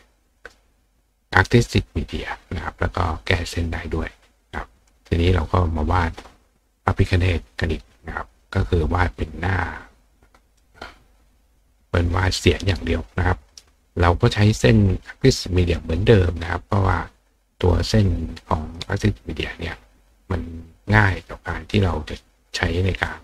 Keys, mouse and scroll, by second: 7.2 click, 9.2-10.6 drag, 12.2 click, 14.9 click, 17.2 click, 18.6 click, 21.2-23.2 drag.